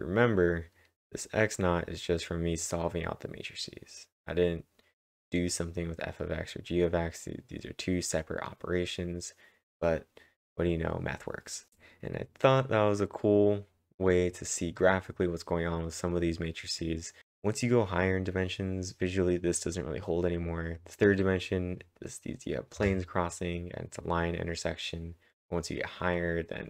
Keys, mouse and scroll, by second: 11.7-17.2 drag, 15.3-16.1 typing, 15.6-17.2 scroll up 2.